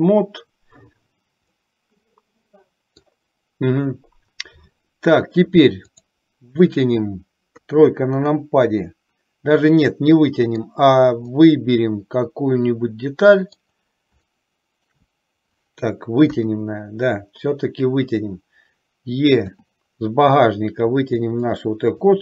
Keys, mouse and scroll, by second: 1.6-3.4 middle drag, 7.7 KP_3, 9.8 middle click, 11.5-13.7 middle drag, 14.5 shift+middle click, 16.4 KP_3, 19.6 e, 22.1 click.